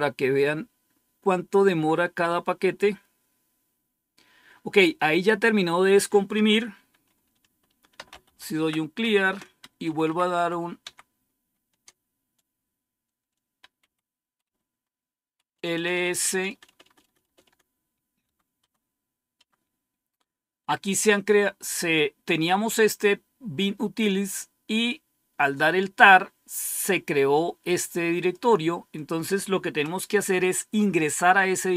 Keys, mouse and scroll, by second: 7.6-8.9 typing, 9.1 Return, 9.7 Up, 10.0 Up, 10.2 Up, 10.7 Down, 13.7 Up, 14.3 Up, 15.7-17.4 typing, 18.1 Tab, 18.5 Tab, 19.3 Tab, 27.2-28.3 drag, 28.8 click, 29.9-31.7 typing.